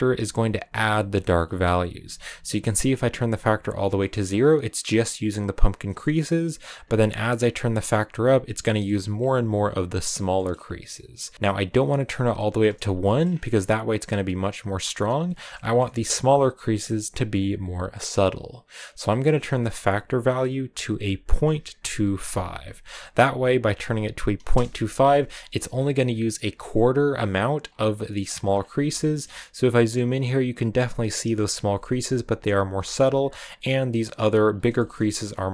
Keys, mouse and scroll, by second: 5.1 click, 7.3-8.4 drag, 8.4 middle click, 9.1 scroll down 1, 9.9-12.9 drag, 12.9 shift+middle click, 13.0 scroll up 4, 15.2 scroll up 1, 15.3-21.5 shift+middle drag, 24.0 middle click, 26.5-27.7 drag, 28.3 middle click, 28.3-28.7 scroll up 4, 28.9 shift+middle click, 29.1 scroll up 1, 31.4 scroll down 3, 31.6-32.8 shift+middle drag, 32.8-33.1 scroll up 2, 34.3 scroll down 3, 34.6 shift+middle click, 35.4-35.5 scroll down 2.